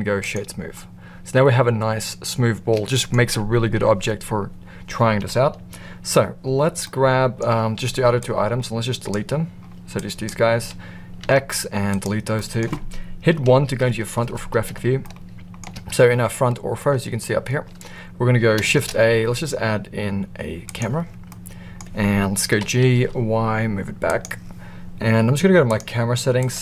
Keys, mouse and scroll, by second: 0.7-3.1 middle drag, 6.8-7.3 middle drag, 8.1-9.1 drag, 9.9-10.3 drag, 11.2 x, 12.3 middle click, 13.6 KP_1, 14.9-15.5 shift+middle drag, 18.7 shift+a, 21.3-21.7 middle drag, 22.5 g, 25.6 click, 26.4-26.6 drag.